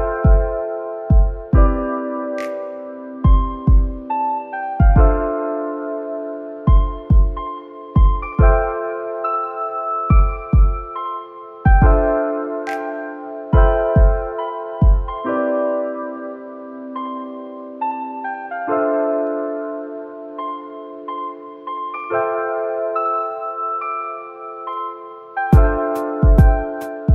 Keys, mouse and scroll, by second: 0.3 Tab, 1.5 click, 2.1-2.5 scroll down 2, 2.5 middle click, 3.5 click, 4.6 shift+click, 5.6 e, 6.8 click, 8.7-9.6 middle drag, 9.6 click, 9.8 c, 11.3 ctrl+b, 13.9 Tab, 14.2-16.0 right drag, 16.0 KP_0, 16.1-17.9 right drag, 17.9-19.0 drag, 19.4 click, 20.3 click, 21.9 click, 22.9 n, 23.3-24.2 middle drag, 24.2-24.8 scroll up 2, 24.8-27.1 shift+middle drag.